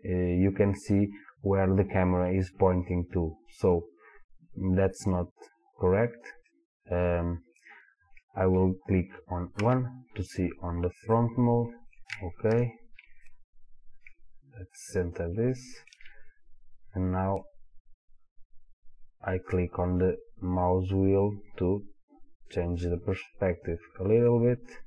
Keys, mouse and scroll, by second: 6.5-24.8 middle drag, 7.8-9.6 scroll down 2, 9.6 KP_1, 12.6 KP_1.